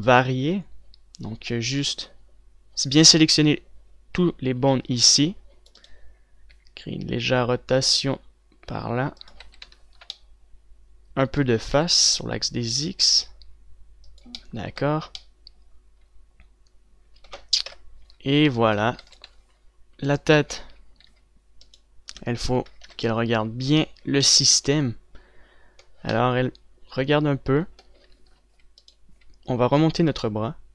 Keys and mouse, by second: 6.8 right click, 7.6 r, 10.4-12.7 drag, 10.4 z, 12.7 r, 15.2 click, 18.7 KP_0, 19.0 z, 19.4 z, 19.7 a, 19.9 ctrl+s, 22.0 a, 23.7 KP_Decimal, 29.3 z, 29.8 z.